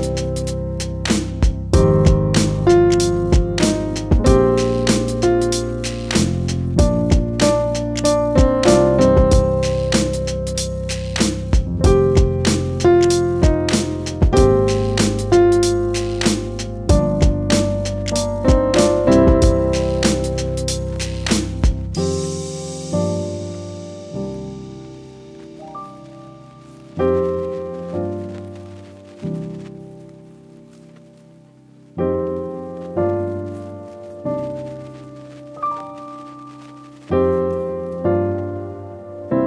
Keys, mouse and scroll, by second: 8.1 click, 8.8 click, 11.6 ctrl+c, 18.9 ctrl+r.